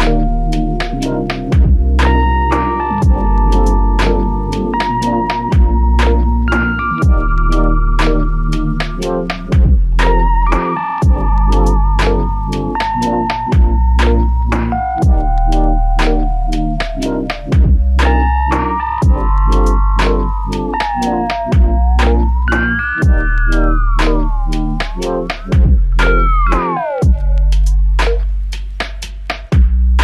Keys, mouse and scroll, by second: 0.4 alt+click, 3.2 double click, 6.1 f, 6.9 double click, 13.7 alt+shift+click, 16.8 double click, 24.6 typing.